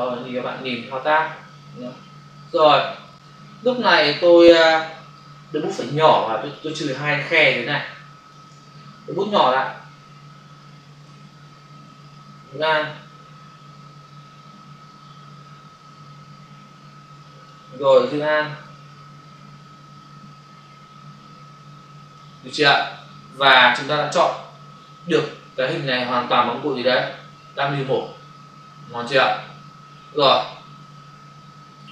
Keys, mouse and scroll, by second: 1.4 alt+click, 2.6 space, 2.8 click, 3.0 space, 7.3 ctrl+click, 9.7 [, 12.1 alt+click, 18.7 alt+click, 23.1 ctrl+0, 24.1 ctrl+-, 30.9 ctrl++.